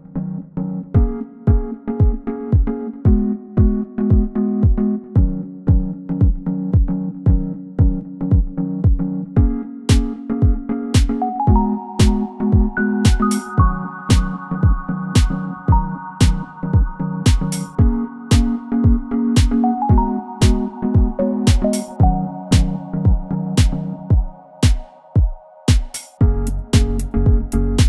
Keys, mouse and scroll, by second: 8.0 shift+a, 15.1 scroll up 1, 15.2 scroll down 1, 16.1 middle click, 19.7 middle click, 20.8 scroll up 1, 23.8 scroll up 1, 27.7 scroll down 1.